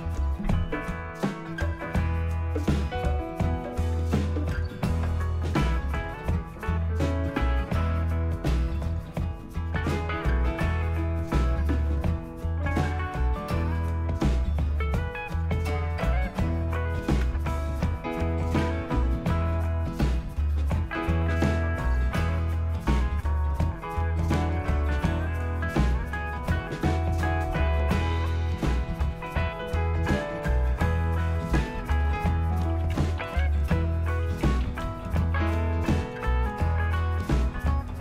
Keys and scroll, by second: 5.1 Return, 17.2 Return, 32.2-35.9 typing, 36.8 Return.